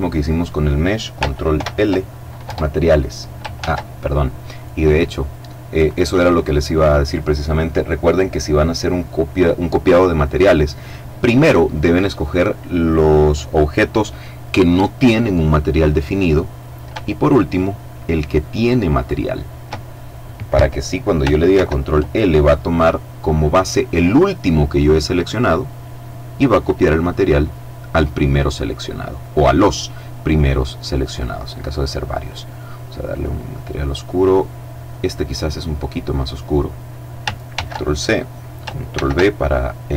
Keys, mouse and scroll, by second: 0.9 ctrl+l, 1.7 Return, 2.9 ctrl+z, 3.9 right click, 4.6 right click, 18.3 shift+right click, 20.9 ctrl+l, 24.6 click, 28.5 right click, 30.3 click, 31.5 click, 32.4 click, 34.3-36.1 drag, 36.8 ctrl+c, 38.2 ctrl+v.